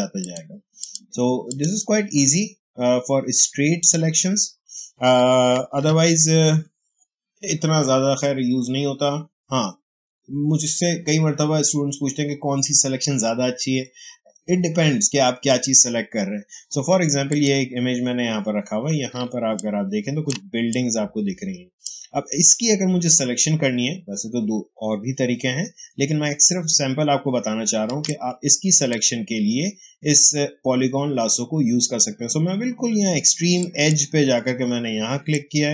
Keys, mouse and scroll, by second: 0.1 click, 3.7 click, 5.7 ctrl+d, 17.2 click, 19.7 ctrl+space, 20.6 click, 20.7 space, 27.7 ctrl+space, 28.0-31.3 ctrl+drag, 33.5 click, 34.8 space, 35.2 click, 35.4 space.